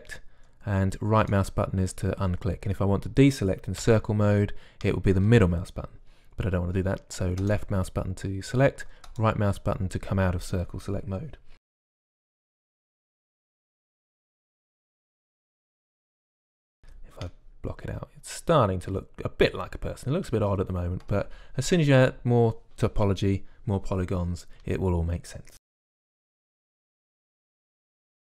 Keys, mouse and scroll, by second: 2.2-4.6 drag, 4.6 c, 10.0-11.5 drag, 11.7-13.9 typing, 13.5 ctrl+r, 14.7 click, 15.2 click, 15.4 middle click, 15.6 click, 17.7 z, 18.0-20.0 middle drag, 25.8-28.0 typing.